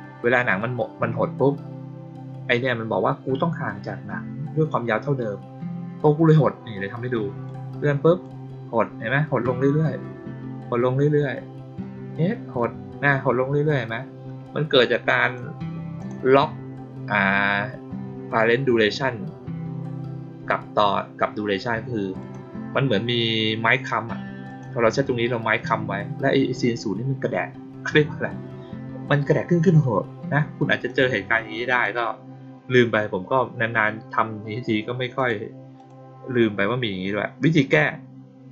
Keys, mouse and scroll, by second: 7.4 click, 11.7 click, 15.2 click, 15.9 click, 22.1 click, 24.4 click, 26.5 click, 30.8 click, 31.6 click, 35.1 click, 35.7 click.